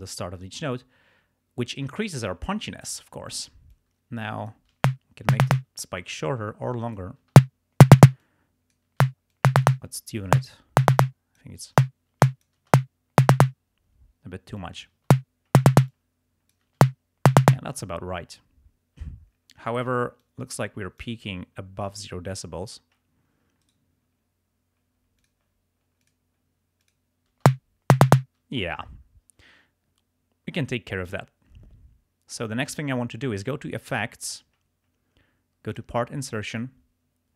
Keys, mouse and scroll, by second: 3.8-4.8 drag, 4.8 space, 5.6 space, 6.1-7.3 drag, 7.3 space, 8.1 space, 8.3 click, 9.1 space, 9.4 click, 9.9 space, 11.0 space, 11.0 click, 11.8 space, 12.3 click, 13.6 space, 14.6 click, 15.1 space, 15.8 space, 16.0 click, 16.8 space, 17.6 space, 20.2-21.2 drag, 23.7 right click, 25.2 click, 26.1 click, 26.9 click, 27.5 space, 28.5 space, 33.9 click, 35.7 click.